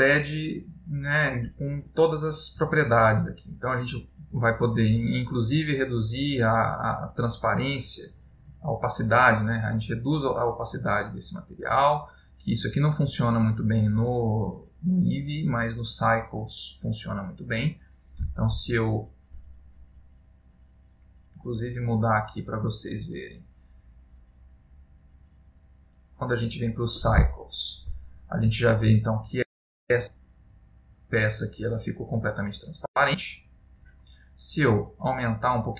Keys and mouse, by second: 3.1 middle click, 5.0 click, 15.1 click, 22.1 click, 23.2 click, 35.4 click.